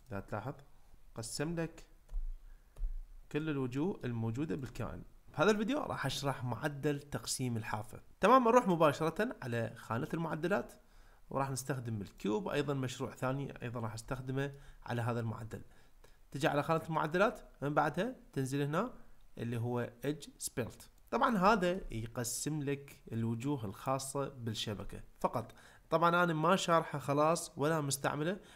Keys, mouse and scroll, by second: 0.0 click, 2.1 l, 2.7 g, 3.3 click, 3.8 middle click, 4.6 click, 10.3 click, 14.1 ctrl+middle click, 17.2-21.0 drag, 21.5 ctrl+middle click.